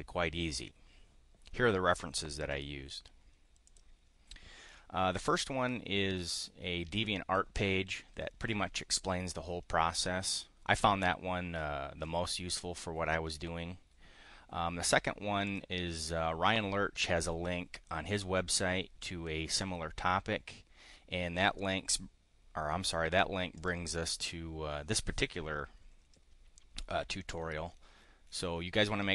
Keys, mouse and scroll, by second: 3.6 click, 15.4 click, 23.5 click.